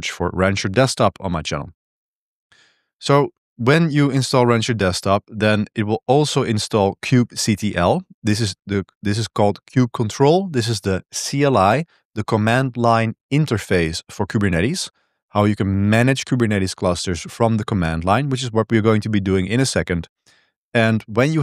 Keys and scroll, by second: 1.6-9.4 typing, 15.0 Escape, 18.1 j, 19.9-21.4 typing.